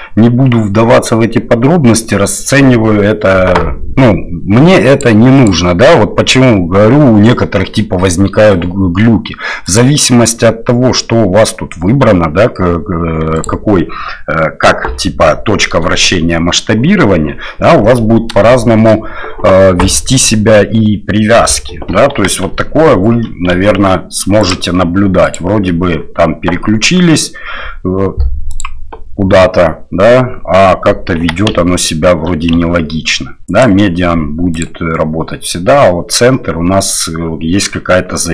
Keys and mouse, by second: 5.0 click, 9.7-12.6 drag, 13.5-17.3 drag, 18.5-18.9 shift+middle drag, 22.2 g, 25.4-30.4 drag, 31.2 g, 34.6-36.4 drag.